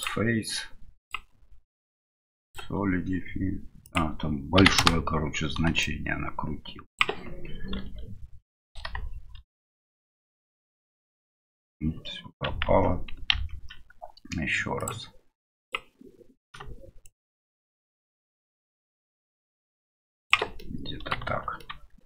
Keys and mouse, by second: 0.0 click, 1.1-2.5 drag, 3.8-5.3 drag, 5.8-7.0 shift+drag, 7.7 KP_Divide, 10.6 middle click, 12.6 ctrl+z, 14.8 click, 17.2-20.3 shift+drag, 21.7 middle click.